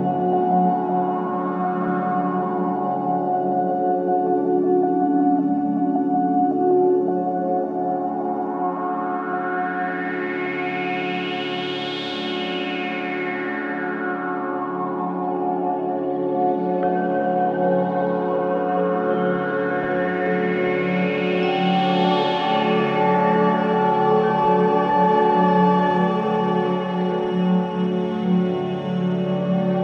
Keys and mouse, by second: 0.6-2.1 drag, 3.0 click, 4.5 click, 8.7 typing, 9.5 click, 9.9 click, 10.3 typing, 10.7 click, 11.2 click, 11.5 typing, 12.2 click, 12.7 click, 13.1 g, 13.7 click, 14.0-15.5 drag, 14.8 g, 16.0 click, 16.7 g, 17.1 click, 17.6 click, 18.0 g, 19.0 click, 22.2 click, 22.5 g, 23.8 click, 25.5 click, 26.5 typing, 27.3-29.0 alt+shift+drag, 29.1 shift+click.